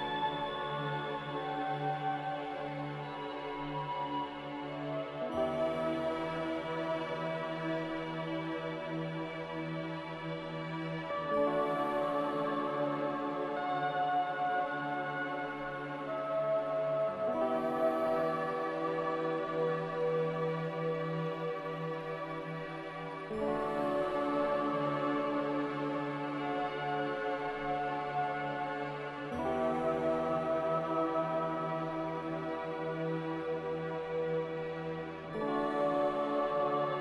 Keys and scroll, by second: 1.1 z, 11.4 ctrl+c, 11.6 ctrl+r, 24.4 m.